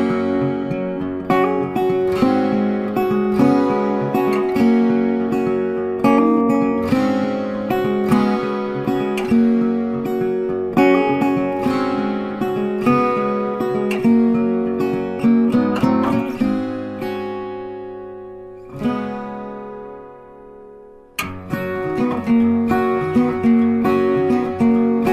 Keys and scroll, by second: 10.6 ctrl+t, 24.1 ctrl+t.